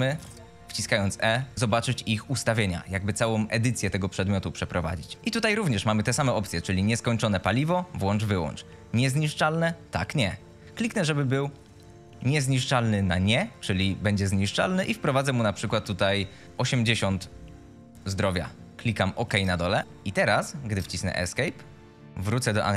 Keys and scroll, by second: 0.0 e, 16.8 8, 17.0 KP_8, 17.0 KP_0, 19.6-20.3 typing, 20.6 Escape.